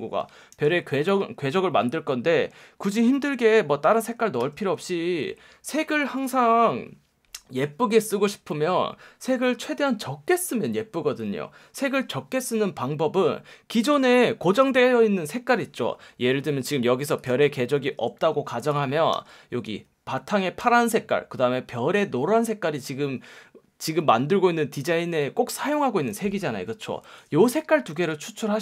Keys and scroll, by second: 0.5 super+z, 3.3 F1, 4.4 F1, 17.9 super+x, 19.1 F1, 20.6 F1, 27.1 super+z.